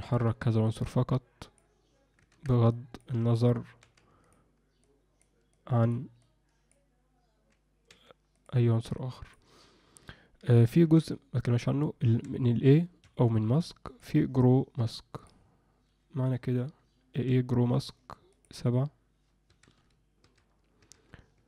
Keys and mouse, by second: 0.1 ctrl+i, 0.7 click, 2.4 ctrl+z, 2.7 click, 3.8 f, 4.8 click, 5.6 click, 6.2 click, 7.9 f, 9.0 click, 10.9 ctrl+i, 12.0 a, 13.9-15.4 drag, 17.1 a, 20.2 a.